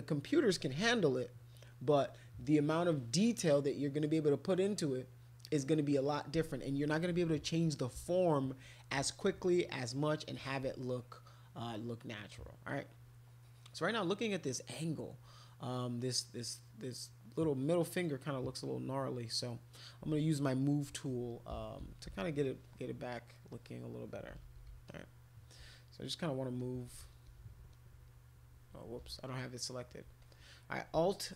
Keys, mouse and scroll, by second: 10.5 alt+click, 12.7-14.4 drag, 17.8-19.8 drag, 21.2-22.6 typing, 22.6 click, 24.3 ], 24.5 ], 24.5 ], 24.7 ], 24.9 click, 26.6 click, 26.8 click, 27.3 click, 27.7 click, 30.2 click.